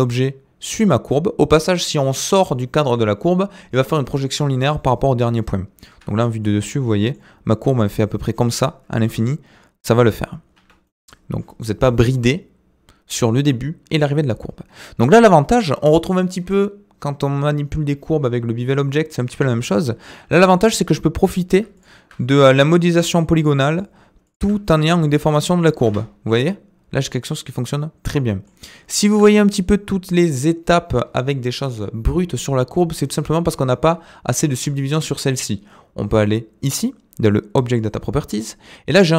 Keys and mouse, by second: 6.4-7.1 middle drag, 9.0 g, 10.8 middle click, 15.1 shift+middle drag, 19.3 Tab, 20.4 alt+click, 21.7 alt+shift+click, 22.5 s, 23.7 click, 24.8 s, 25.8 Tab, 26.3-28.4 middle drag, 28.9 shift+middle click, 37.6 click.